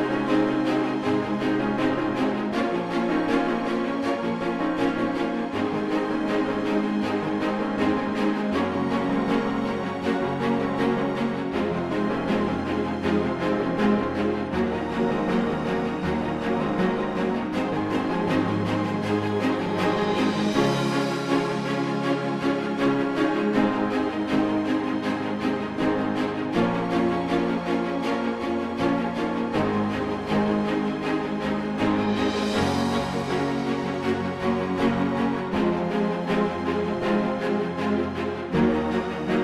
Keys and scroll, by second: 27.1 space.